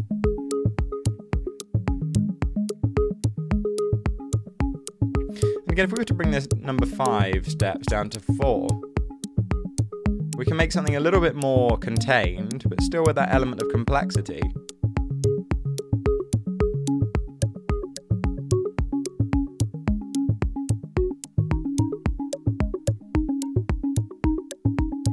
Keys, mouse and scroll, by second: 7.8 4, 8.0 Return.